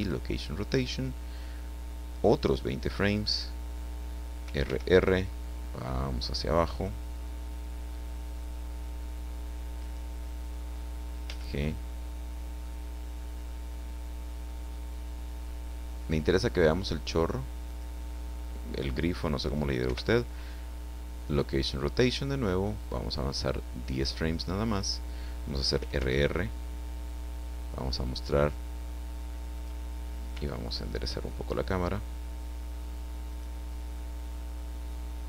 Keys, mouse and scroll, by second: 0.0 click, 2.1-3.4 drag, 4.4 r, 9.8 click, 11.2 g, 11.5 click, 17.6 click, 19.8 i, 21.2 click, 23.4 click, 25.7 r, 29.6 click, 30.3 r, 33.3 click.